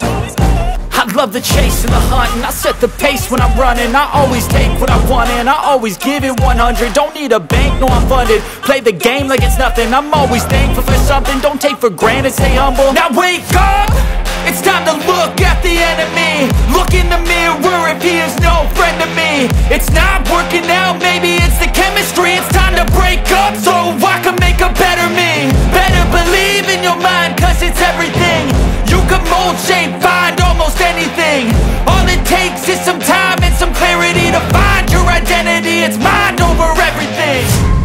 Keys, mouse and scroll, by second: 1.6 click, 2.9-4.5 scroll, 13.6 click, 14.6 click, 16.4 click, 17.6 click, 19.2 click, 20.2 click, 23.4 click, 25.9 click.